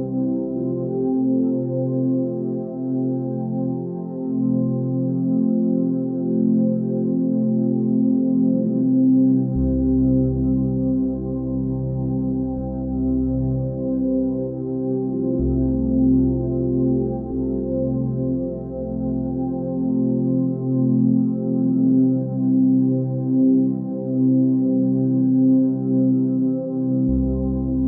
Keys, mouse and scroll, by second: 14.6 ctrl+space, 21.0 ctrl+z.